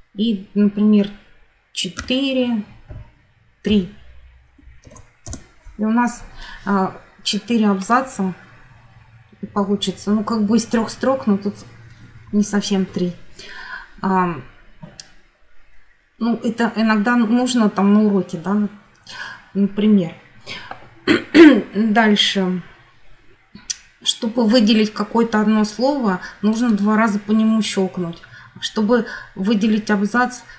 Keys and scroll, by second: 1.8 4, 2.7 ,, 3.5 3, 4.7 shift+0, 5.1 Return.